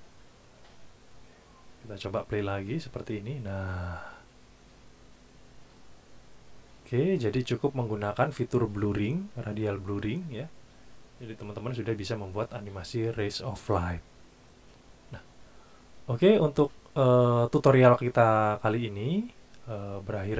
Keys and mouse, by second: 2.5 click.